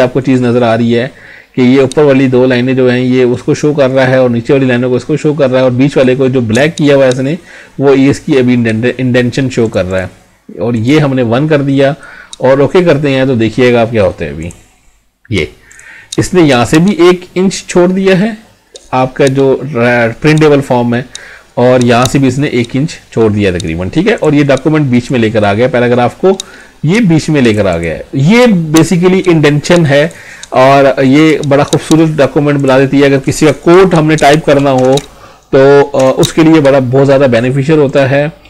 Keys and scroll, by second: 33.7 Up.